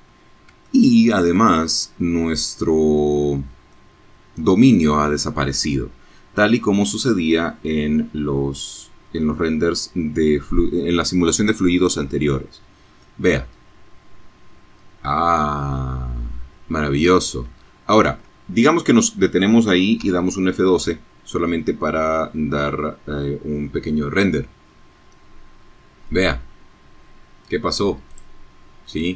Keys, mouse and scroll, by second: 0.5-0.8 scroll up 1, 0.8 scroll down 1, 1.1 scroll up 1, 1.6-7.2 middle drag, 11.3 space, 15.4 space, 18.0 F12, 23.2-23.7 scroll down 1, 24.0 scroll up 1, 26.0 click, 26.9-28.4 middle drag, 28.5 click.